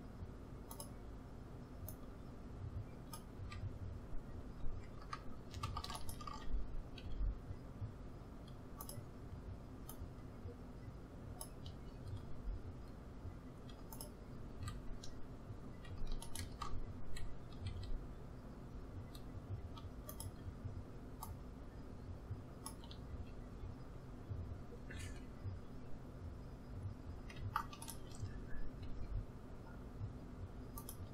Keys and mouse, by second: 1.8-3.7 drag, 3.3 a, 6.8-8.4 drag, 7.0 s, 9.9-11.8 drag, 12.2 s, 14.5 a, 17.6-20.1 drag, 17.6 s, 21.2-23.0 drag, 23.1 a, 28.9-30.7 drag, 28.9 s.